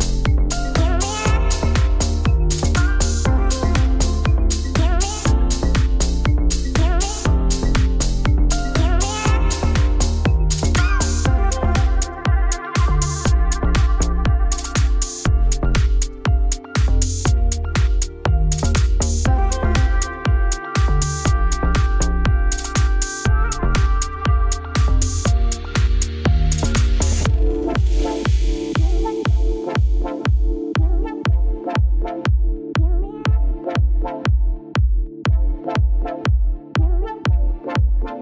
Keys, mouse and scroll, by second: 0.2-1.3 scroll up 3, 10.2 click, 11.1 click, 12.0 click, 13.2 click, 14.8 click, 18.0 click, 18.7 shift+middle click, 18.9-19.3 scroll up 3, 19.3 scroll down 2, 19.4-20.5 shift+middle drag, 20.5-22.4 drag, 23.0 click, 23.9-26.6 drag, 26.6-27.0 scroll up 2, 27.0 shift+s, 27.2 Tab, 27.6 s, 29.5 ., 29.7 s, 31.6-33.1 shift+drag, 33.1 Tab, 33.2 scroll down 3, 33.4-33.9 scroll up 1, 33.9 click, 34.1 Tab, 34.4 a, 34.5 s, 36.2 Tab, 36.6 Tab.